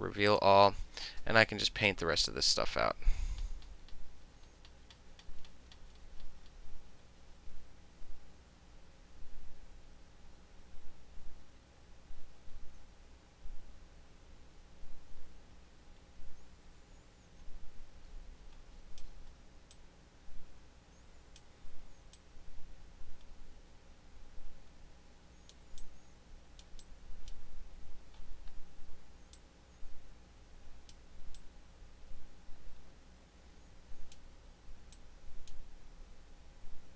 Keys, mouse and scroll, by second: 0.4 click, 1.5 middle click, 2.0-19.1 drag, 19.1 middle click, 19.8-21.5 drag, 21.5 middle click, 22.2-25.6 drag, 25.6 middle click, 25.9 click, 26.7 middle click, 26.9 click, 27.4-28.9 middle drag, 29.4-31.0 drag, 31.5-34.2 drag, 35.0 click.